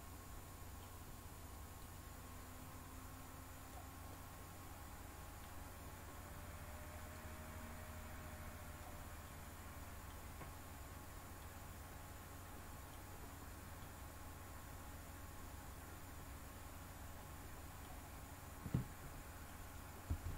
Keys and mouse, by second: 1.8-3.7 drag, 4.1-5.4 middle drag, 7.2-8.8 drag, 9.3-10.1 middle drag, 11.4-13.0 middle drag, 13.8-17.8 middle drag, 20.0 r.